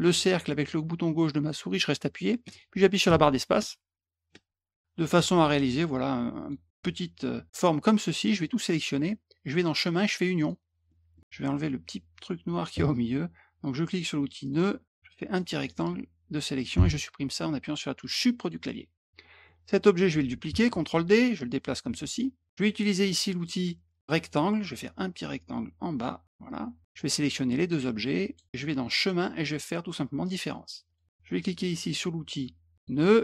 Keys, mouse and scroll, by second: 2.4-5.1 typing, 7.5 click, 9.5 click, 10.4 click, 10.9 middle click, 14.4 click, 14.9 click, 18.4 click, 18.9-19.4 drag, 20.9-21.9 drag, 24.0 click, 24.9-26.2 drag, 27.0 click, 27.6 click, 29.0 click, 30.2 click, 30.9 click, 32.8 click.